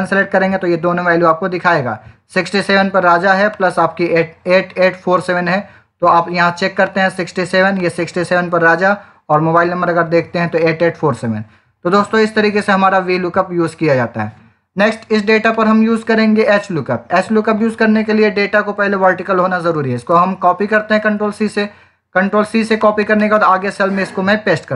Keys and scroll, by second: 19.8 ctrl+c.